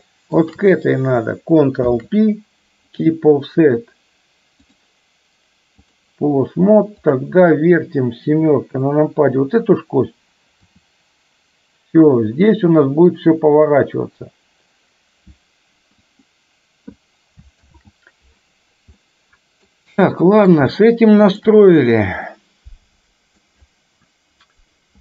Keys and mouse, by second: 0.4 shift+click, 1.8 ctrl+p, 4.8-6.1 drag, 7.2 click, 8.4 KP_7, 10.7 r, 17.7 ctrl+z, 18.9-19.7 middle drag, 20.1-20.7 middle drag, 20.8-21.4 shift+middle drag, 22.3-23.4 middle drag.